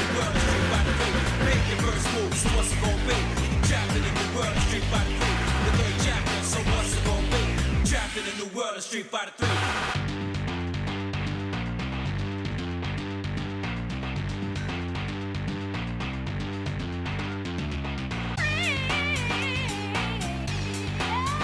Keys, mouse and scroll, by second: 3.6 click, 4.2 shift+click, 4.8 middle click, 6.9 x, 8.4 middle click, 9.0 shift+middle click, 9.7 middle click, 10.2 scroll down 1, 10.6 shift+middle click, 11.6 middle click, 12.1 shift+middle click, 12.5 shift+middle click, 12.7 shift+middle click, 13.2 shift+middle click, 13.8-14.6 scroll up 2, 14.6 shift+middle click, 15.3 scroll up 1, 15.8-16.2 scroll up 3, 16.2-18.4 shift+middle drag, 19.1 shift+middle click, 19.7 middle click, 20.6-21.4 shift+middle drag.